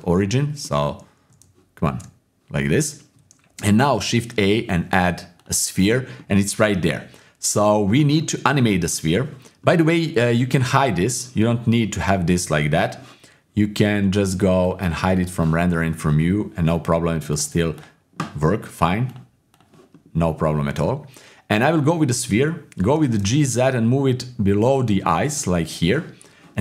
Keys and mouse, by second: 0.2 click, 0.6 click, 1.4 shift+s, 2.7 click, 3.5 shift+a, 6.2 click, 7.1 click, 8.2 middle click, 8.4-10.1 drag, 10.1 middle click, 10.7 click, 14.6 click, 15.1 click, 17.3 click, 19.1 click, 19.9 middle click, 21.7 click, 22.9 g, 24.9 middle click.